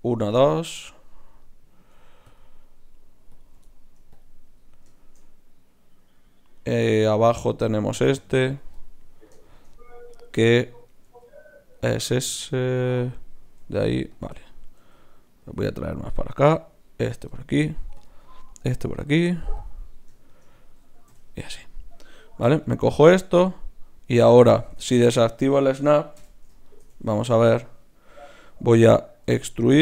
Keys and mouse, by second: 0.7 right click, 0.7 middle click, 2.3-5.8 drag, 5.8 right click, 6.1 middle click, 7.6 right click, 7.9 g, 8.7 click, 8.8-9.8 right drag, 9.8-10.9 middle drag, 10.9-13.6 right drag, 11.0 g, 13.6 g, 14.8 g, 16.1-21.9 drag, 16.4 g, 18.0-21.9 right drag, 21.1 f, 21.9-23.9 middle drag, 22.4 l, 25.0 shift+Tab, 26.2 KP_3, 29.2 e.